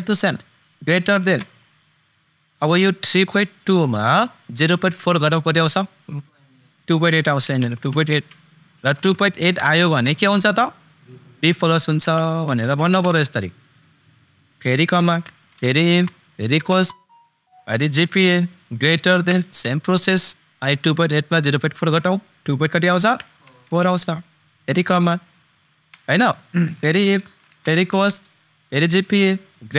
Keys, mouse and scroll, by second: 1.2 shift+super+., 9.4 super+., 12.2 shift+super+Num_Lock, 12.4 shift+super+b, 12.6 shift+super+■, 12.9 shift+super+·, 15.0 super+·, 15.6 super+(, 15.6 i, 15.8 super+f, 16.5 shift+super+9, 18.1 super+click, 19.4 shift+super+., 27.9 shift+super+9, 28.8 super+click.